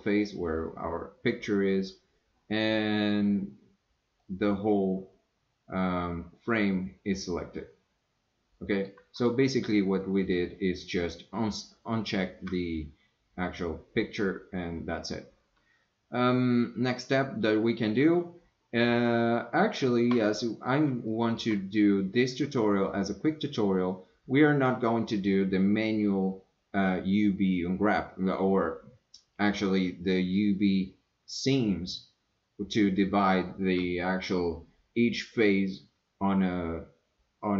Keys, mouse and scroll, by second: 1.7 scroll down 1, 1.8-2.8 middle drag, 4.2 scroll down 1, 4.3-8.9 middle drag, 17.4 scroll down 1, 17.6 middle click, 19.6 shift+scroll down 1, 19.8 shift+middle click, 20.4 middle click, 21.1 shift+middle click.